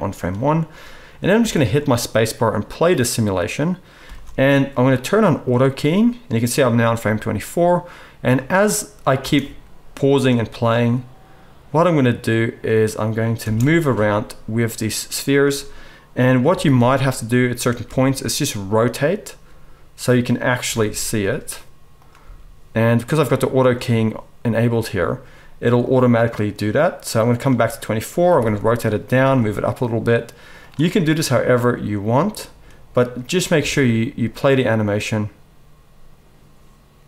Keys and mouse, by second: 0.3-5.5 drag, 1.4 space, 4.4 space, 5.5-26.0 middle drag, 7.0 g, 9.2 space, 13.4 space, 13.9 g, 16.4 r, 17.8 g, 20.6 r, 22.1 g, 26.0-29.2 drag, 28.2 r, 29.1-31.5 middle drag, 29.3 g, 31.5-37.0 drag, 33.5 space.